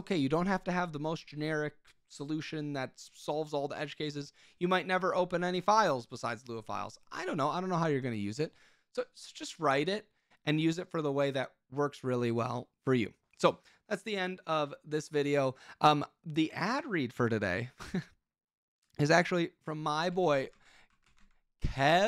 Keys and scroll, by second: 20.2 super+k, 20.5 ctrl+t, 20.7-22.0 typing, 21.8 ctrl+BackSpace, 21.9 ctrl+BackSpace.